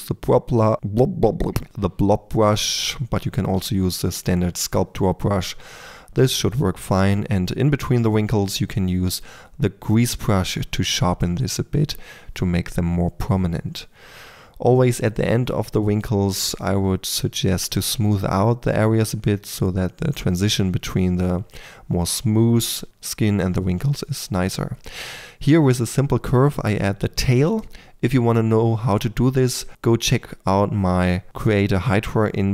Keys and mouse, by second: 0.9 drag, 1.2-3.8 typing, 1.5 click, 2.6 drag, 3.1 click, 4.2-5.6 drag, 4.9-7.4 typing, 8.1 shift+click, 9.2 click, 10.0 click, 10.9 f, 12.2 click, 13.2 click, 14.0-16.4 typing, 14.4-15.1 drag, 15.4 drag, 16.6-17.7 drag, 17.4-19.9 typing, 17.8 click, 19.0 click, 19.2 click, 20.4 click, 21.6 f, 21.9-23.0 drag, 22.3 f, 23.3-24.6 typing, 24.1-25.2 drag, 27.2 Tab, 27.4 a, 27.8 click, 28.1 Tab, 29.2 click, 29.4 Tab, 29.6 Tab, 29.8 Tab, 29.9-30.6 typing, 31.1 alt+g, 31.7-32.5 typing.